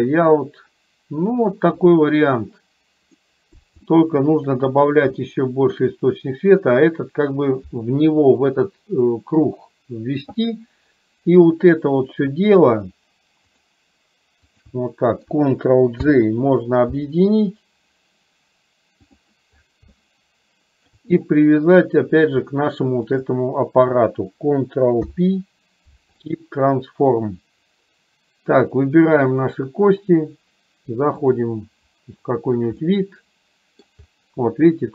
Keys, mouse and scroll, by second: 1.8 click, 3.3 middle click, 3.9-4.7 shift+middle drag, 5.3 shift+middle click, 14.6 shift+click, 20.1 shift+middle click, 22.9 shift+click, 25.1 ctrl+p, 29.4 click, 32.8-33.9 middle drag.